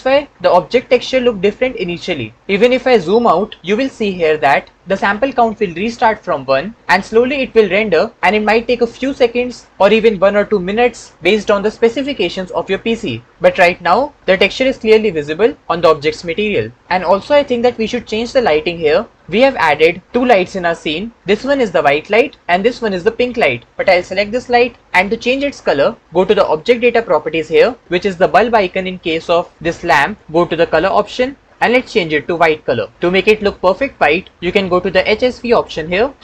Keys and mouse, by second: 19.2-20.0 middle drag, 30.8 click.